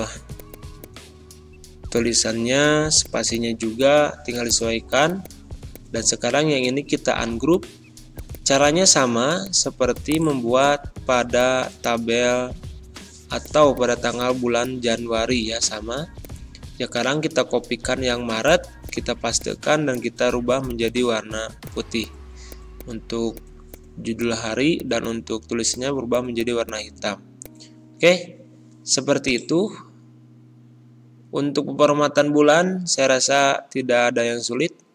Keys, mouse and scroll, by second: 0.1 scroll down 1, 0.3 click, 1.3-1.7 scroll down 1, 1.9 click, 2.2 ctrl+scroll down 1, 3.0 click, 4.5 right click, 4.9 click, 6.2 ctrl+scroll up 1, 7.5 click, 8.6 3, 9.4 click, 10.4-13.3 typing, 11.3 click, 11.8 click, 12.3 Pause, 13.4 click, 14.8 BackSpace, 15.0 alt+Tab, 16.2 click, 17.0 ctrl+c, 17.1 alt+Tab, 17.9 ctrl+v, 18.4 click, 21.6 click, 27.4-30.2 drag, 30.2 Delete, 34.2 BackSpace.